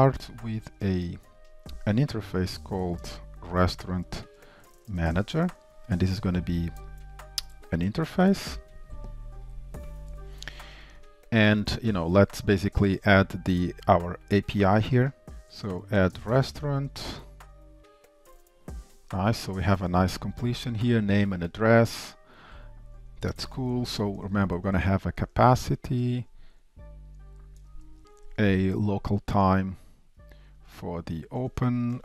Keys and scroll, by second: 11.2 shift+Return, 19.7 Tab, 30.5 Return.